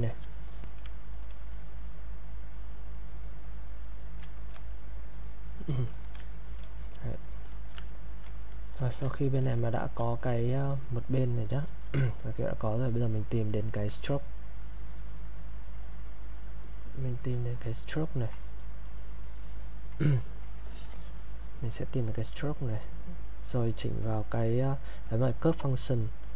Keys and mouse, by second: 1.0 ctrl+right click, 1.4 click, 3.2 click, 4.4 ctrl+click, 6.0 alt+click, 6.3 ctrl+right click, 6.8 click, 7.5 alt+click, 7.9 ctrl+right click, 8.8 alt+click, 9.1 ctrl+alt+right click, 9.8 alt+click, 11.6 alt+click, 17.5 click, 21.7 click.